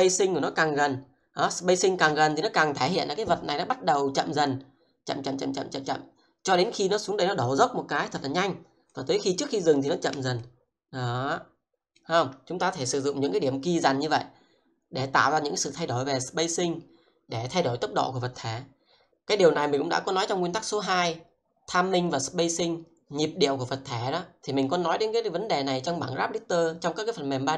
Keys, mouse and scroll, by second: 0.9 shift+middle click, 2.2 click, 8.9 click, 10.4 shift+middle click, 13.0 click.